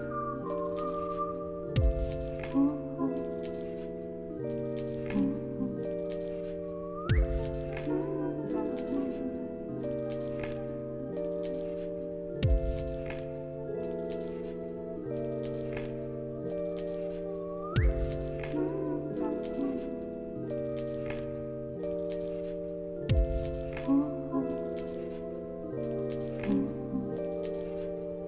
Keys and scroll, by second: 0.0 alt+[, 0.3 ctrl+s, 4.9 ctrl+s, 6.5 u, 10.6 alt+x, 17.0 alt+x, 22.7 z, 24.4 alt+x, 27.2 alt+x.